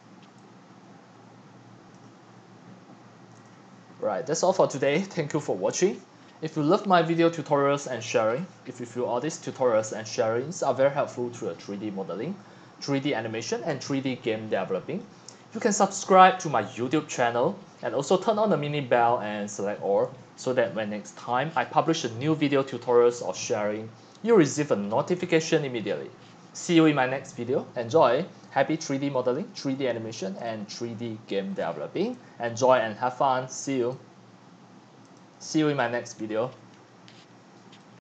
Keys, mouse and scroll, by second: 1.9-3.6 drag, 31.1-32.0 drag, 32.0 x, 32.5 x, 32.6 x, 32.8-33.4 drag, 35.2 click, 36.4 click.